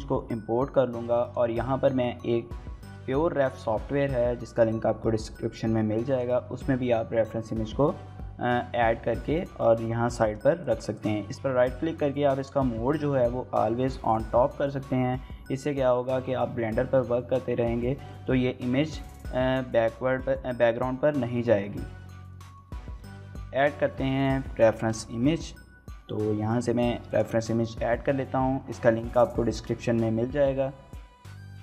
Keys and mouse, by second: 16.8-17.3 middle drag, 17.6-18.1 middle drag, 22.3 middle click, 22.9 KP_1, 24.0 shift+middle drag, 24.7 shift+a.